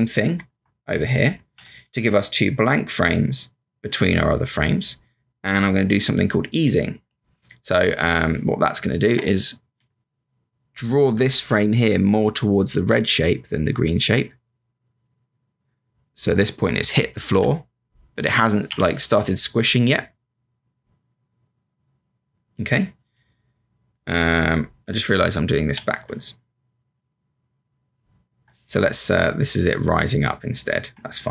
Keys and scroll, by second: 0.2 F5, 0.5 F5, 3.0 F7, 7.8 space, 8.6 space, 9.1 space, 9.7 b, 17.3 v, 18.7 q, 31.2 Up.